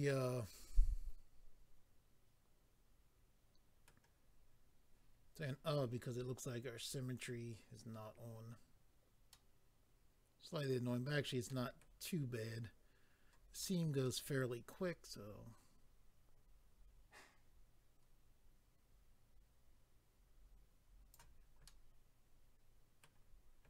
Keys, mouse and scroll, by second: 5.2-6.1 scroll down 4, 7.4 scroll down 1, 9.3 middle click, 11.5 middle click, 13.6 middle click, 14.7 click, 21.6 middle click.